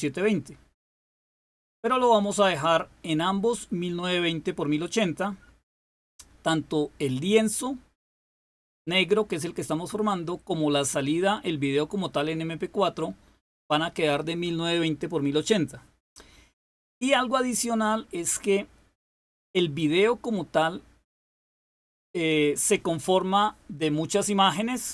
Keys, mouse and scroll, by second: 1.8 click.